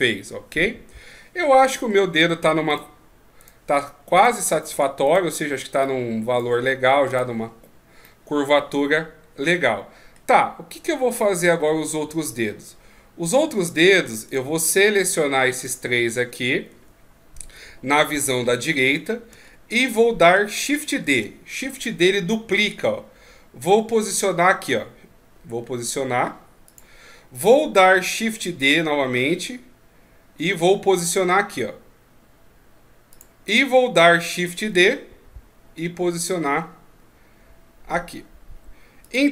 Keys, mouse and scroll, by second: 2.7 right click, 3.4 right click, 3.7 Tab, 4.2 right click, 4.7 Tab, 5.0 right click, 5.8 click, 7.1 right click, 8.0 middle click, 10.5 scroll down 3, 11.1 middle click, 12.1-13.8 scroll up 2, 14.3 shift+right click, 14.9 shift+right click, 15.7 shift+right click, 16.7 KP_3, 19.4-19.9 shift+scroll up 3, 21.1 shift+d, 28.5 shift+d, 34.7 shift+d.